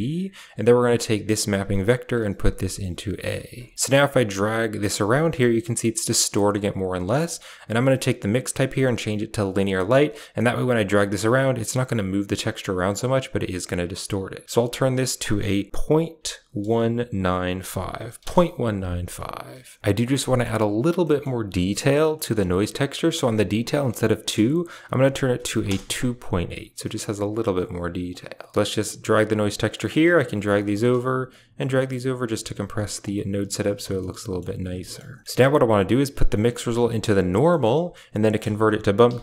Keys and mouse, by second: 0.3 click, 1.2 click, 1.7-3.2 drag, 3.7-7.0 drag, 7.7-9.5 drag, 10.3-13.8 drag, 14.6 click, 20.1 middle click, 20.9 middle click, 22.0 middle click, 23.1-25.6 drag, 28.0 click, 28.4 middle click, 28.7 click, 29.8 drag, 30.1 g, 31.1 click, 31.4 g, 32.9 drag, 33.4 g, 33.7 a, 33.9 middle click, 34.7 middle click, 35.6 click, 36.3-37.1 drag, 37.4 middle click, 38.1 shift+a.